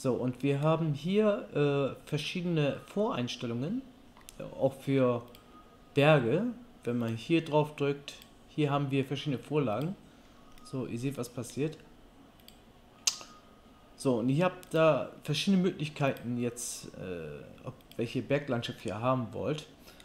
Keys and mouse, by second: 10.8 middle click.